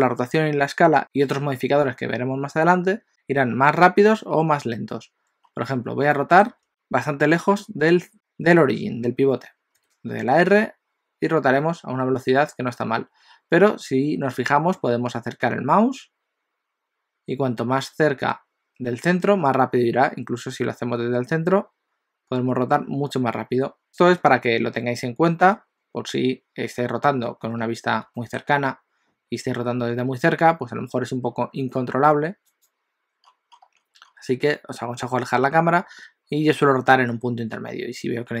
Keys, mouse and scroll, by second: 5.5 scroll down 3, 6.2 middle click, 9.7 r, 26.6-27.8 scroll up 12, 28.1 shift+middle click, 28.6 scroll up 2, 29.6 r, 33.3-34.1 scroll down 7, 34.3-36.9 scroll down 3, 36.9 r.